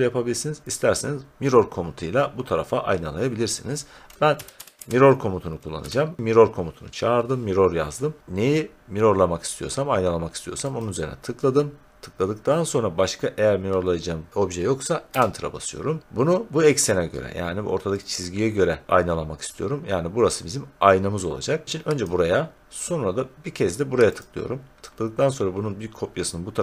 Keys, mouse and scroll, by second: 4.1-5.2 typing, 5.8 Return, 10.8 click, 15.1 Return, 22.0 click, 24.2 click.